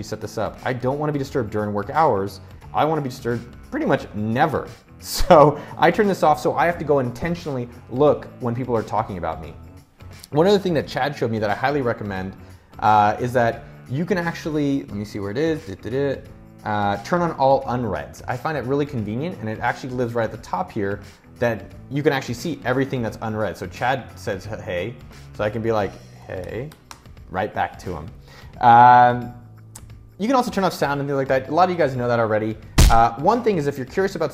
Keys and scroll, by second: 25.5-26.7 typing.